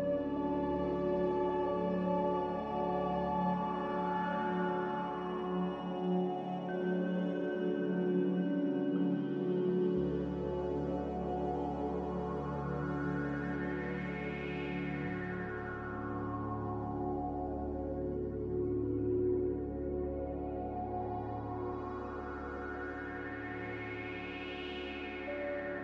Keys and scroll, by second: 9.9-10.7 typing, 14.5-15.4 typing, 16.7-17.5 typing, 18.8 n, 20.3 c.